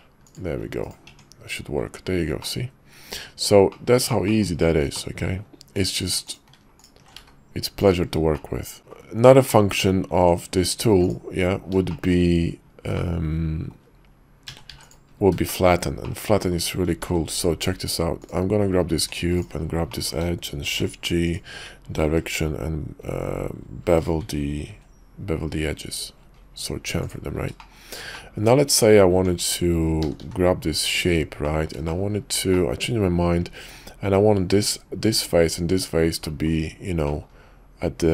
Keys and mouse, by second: 0.2-0.6 shift+drag, 1.1 Tab, 2.4 click, 3.7 click, 4.2 shift+click, 4.9 click, 5.5 Tab, 6.7-7.0 alt+shift+drag, 7.1 x, 8.6 click, 10.1 Tab, 10.9 x, 11.9 shift+drag, 12.9-13.7 drag, 14.5 a, 14.6 x, 15.5 shift+drag, 16.0-16.5 drag, 17.0 shift+a, 18.9 Tab, 19.3 click, 19.9 click, 20.6 shift+g, 22.3 ctrl+b, 24.7 ctrl+b, 27.6 shift+click, 28.1 click, 29.1 Tab, 30.0 s, 31.4 click, 31.9 shift+drag, 32.6-33.8 middle drag, 36.3 middle click, 37.1 middle click.